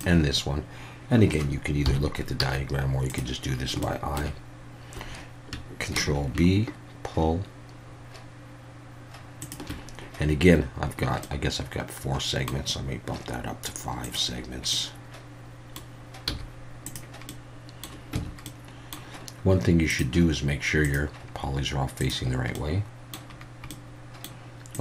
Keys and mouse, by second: 1.8 KP_1, 2.4 z, 3.8 shift+middle click, 5.9 ctrl+b, 9.4 shift+click, 11.3-12.5 middle drag, 14.0 click, 14.8 middle click, 16.3 z, 17.4 middle click, 18.1 Tab, 18.4 middle click, 20.0-22.3 drag, 22.5-23.1 middle drag, 23.7-24.2 middle drag.